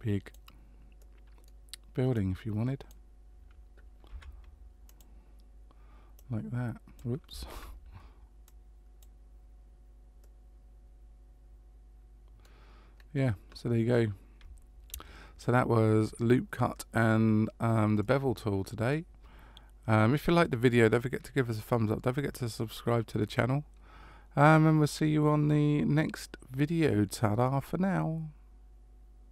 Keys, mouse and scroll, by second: 1.0 middle click, 2.1 click, 4.1 s, 6.1 click, 7.5 ctrl+z, 8.4 click, 10.2 middle click, 12.9 scroll up 1, 13.9-14.8 scroll up 2, 18.0 middle click.